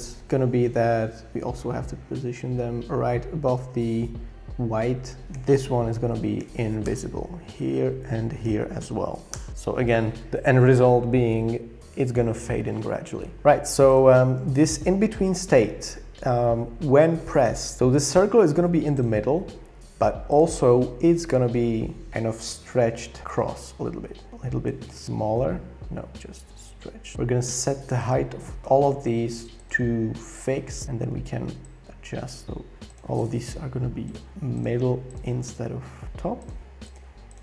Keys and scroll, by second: 5.3 shift+Down, 5.9 shift+Down, 6.1 shift+Down, 6.4 shift+Down, 6.8 Return, 8.4 shift+Down, 9.3 Return, 25.4 super+z, 28.6 super+z.